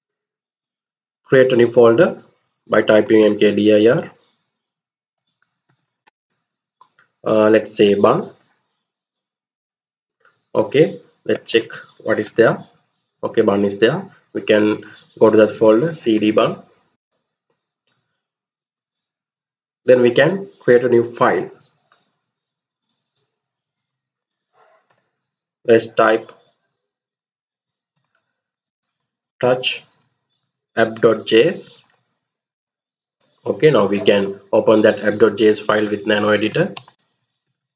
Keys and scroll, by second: 2.5-3.3 typing, 4.6-6.0 typing, 7.3-8.0 typing, 9.2 Return, 10.8-11.5 typing, 11.9 Return, 13.7-16.5 typing, 16.6 Return, 24.4-25.6 typing, 27.6-32.0 typing, 32.2 Return, 35.3-37.7 typing.